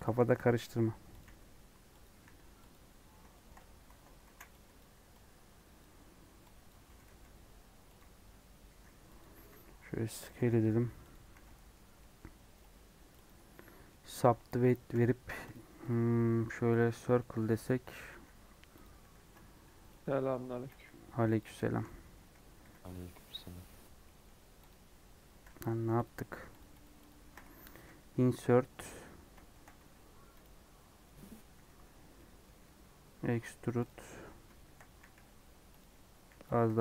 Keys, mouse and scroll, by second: 0.0-2.1 typing, 3.3 shift+middle click, 3.7 Tab, 4.2 alt+z, 4.7 Left, 5.7 Left, 6.6 Left, 6.9 g, 9.3 s, 11.3 alt+z, 11.4 middle click, 11.8 scroll up 1, 11.9-13.2 middle drag, 13.2 right click, 13.5-14.8 middle drag, 14.8 |, 16.7 right click, 17.1 middle click, 17.7 scroll down 1, 18.0 e, 19.1 ctrl+b, 20.6 s, 21.5-24.6 shift+middle drag, 24.6 click, 25.0 scroll up 1, 26.0 click, 26.5 shift+click, 26.7 shift+click, 27.0 shift+click, 27.8 i, 29.0 scroll down 1, 29.4 shift+middle click, 29.7 s, 32.1 middle click, 32.4 e, 34.5 shift+middle click, 34.9 s, 36.1 s, 36.7 g.